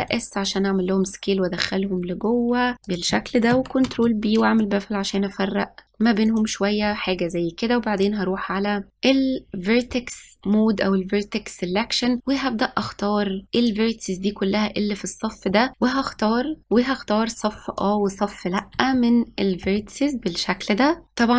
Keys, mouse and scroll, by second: 2.7 ctrl+b, 5.8-8.8 middle drag, 8.9-10.3 drag, 13.4 middle click, 14.8 click, 15.7 ctrl+z, 17.8 shift+click, 18.9-20.3 middle drag, 20.3 shift+click, 21.2 middle click.